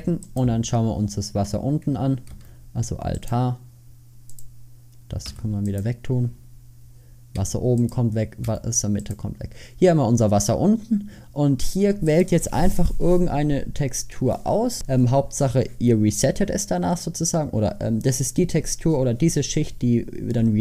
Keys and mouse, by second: 2.4 alt+h, 5.3 h, 7.5 h, 8.5 h, 12.2-18.4 drag.